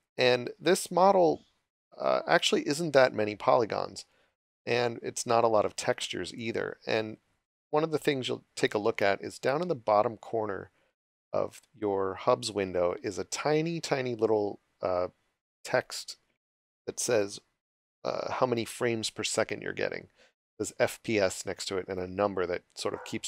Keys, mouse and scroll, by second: 22.9 click.